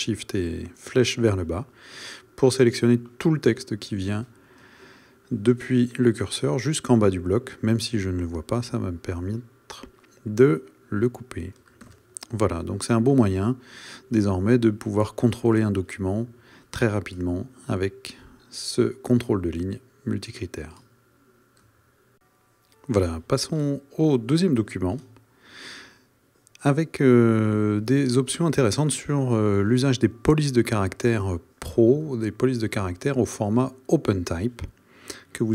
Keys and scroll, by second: 12.0 shift+super+à.